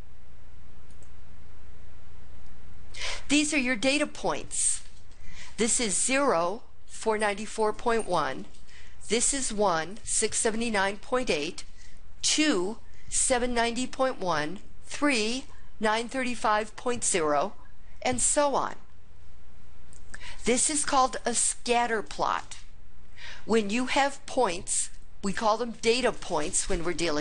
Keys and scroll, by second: 0.9 Return.